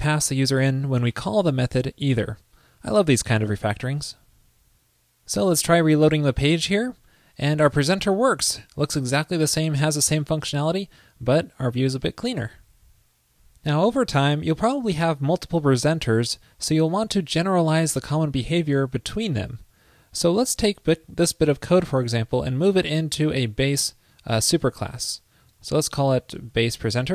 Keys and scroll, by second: 3.8 super+s, 25.1 super+x.